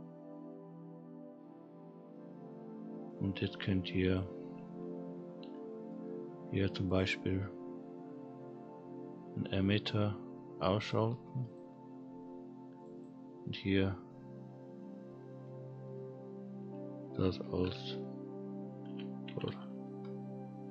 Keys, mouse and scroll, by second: 1.9-2.5 scroll down 3, 2.5 middle click, 2.9-4.0 scroll down 2, 4.0 click, 5.6 middle click, 6.9 click, 10.8 click, 11.5 click, 12.7 click, 12.9-20.7 drag.